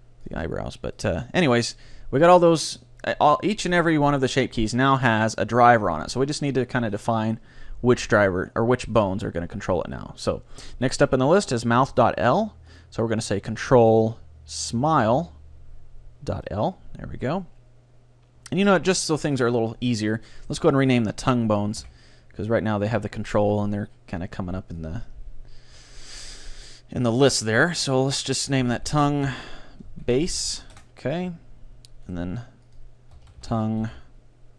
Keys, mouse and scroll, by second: 0.3-2.1 drag, 7.9-9.8 drag, 12.7-15.1 drag, 18.7-21.3 middle drag, 20.5-22.1 right drag, 21.8 n, 24.8-26.7 drag, 32.1-33.9 right drag, 32.7-34.5 drag.